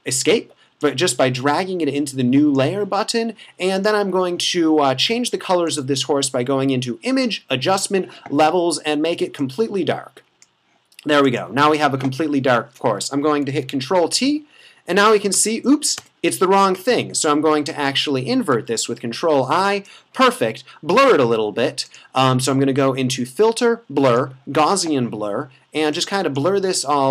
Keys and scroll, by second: 13.4 super+t, 16.0 Return, 18.9 super+i.